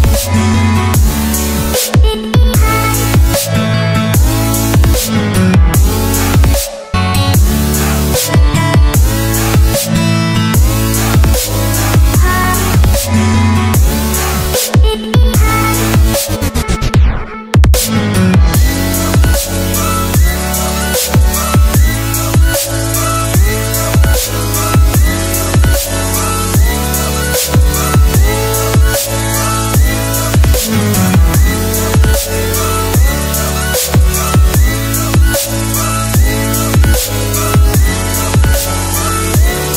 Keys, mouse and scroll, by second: 2.6 click, 3.9 Return, 4.6 right click, 9.8 alt+Tab, 10.5 alt+click, 12.7 Return, 13.2 click, 14.9 scroll down 1, 16.3 click, 18.7 alt+Tab, 20.1 v, 21.5 click, 25.4 Return, 25.8 click, 27.2 Delete, 28.9-38.8 scroll up 1, 38.8 click.